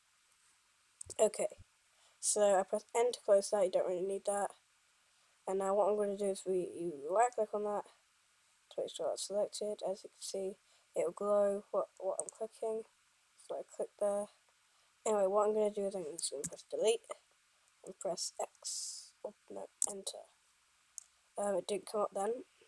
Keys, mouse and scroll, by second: 1.2 n, 16.7 Delete.